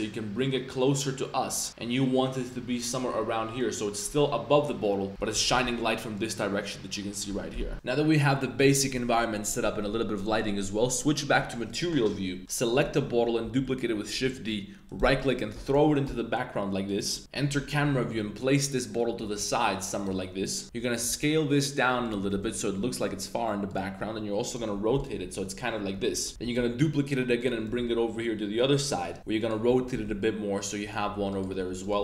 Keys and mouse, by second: 2.8 click, 3.5 click, 5.3 g, 5.6 z, 7.5 KP_2, 11.6 click, 12.4-12.8 middle drag, 13.4 shift+d, 14.8 click, 15.1 click, 15.5 g, 15.7 y, 16.0 x, 17.2 KP_0, 17.8 g, 18.6 click, 19.2 r, 19.9 click, 20.6 super+z, 21.0 s, 22.2 r, 22.4 y, 23.9-26.4 typing, 24.4 drag, 25.3 click, 27.6 r, 27.8 z, 28.7 click, 29.2 r, 29.6 s, 30.8 click, 31.0 g, 31.5 s, 31.9 g.